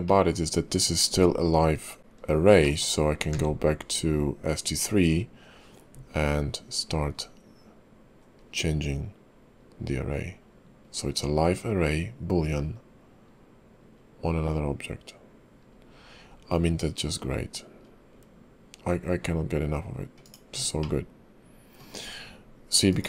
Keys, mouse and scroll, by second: 0.0 middle click, 2.6 shift+middle click, 3.0 scroll up 2, 3.3 q, 20.8 middle click, 21.9-22.9 scroll down 1, 22.9-23.0 scroll down 1, 22.9 /.